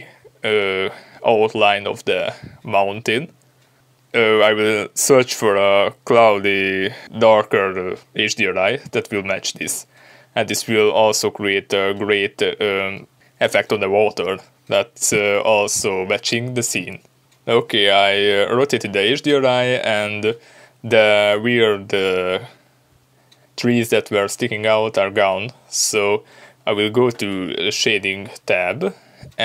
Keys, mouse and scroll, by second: 4.0 ctrl+b, 6.4 click, 7.2-15.8 drag, 16.5-24.7 drag, 19.4 ctrl+b.